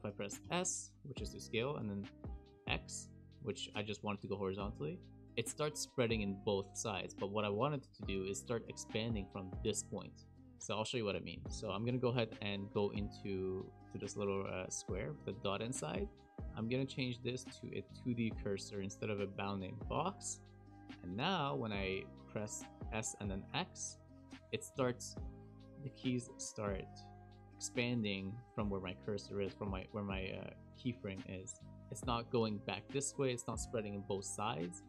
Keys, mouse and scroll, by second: 0.4 s, 2.2 s, 22.8 s, 26.0 s.